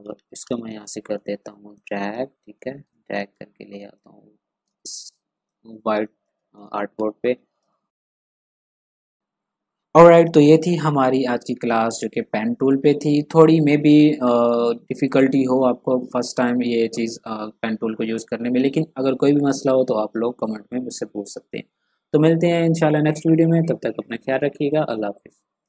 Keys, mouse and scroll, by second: 0.2 ctrl+click, 0.4 space, 1.1 shift+click, 2.8 space, 2.9 click, 4.6 space, 4.7 click, 5.9 space, 6.0 click, 6.8 ctrl+scroll up 1, 7.6 ctrl+space, 7.6 click, 7.9 ctrl+click, 8.0 ctrl+scroll up 1, 8.2 ctrl+scroll down 1, 8.3 click, 8.5 ctrl+scroll up 1, 8.7 click, 8.8 scroll down 1, 9.1 click, 25.6 click.